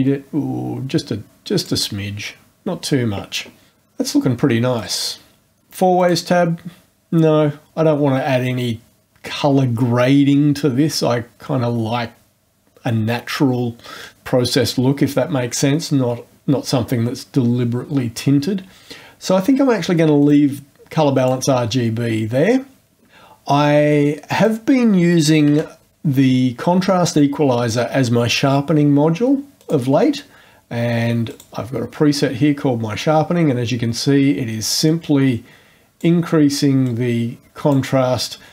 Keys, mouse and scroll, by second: 4.7-5.5 drag, 5.9 click, 20.2 click, 21.1 click, 24.3 click, 25.1-25.9 typing, 27.1 click, 29.6 click, 31.3 click, 34.8 click, 36.8 click.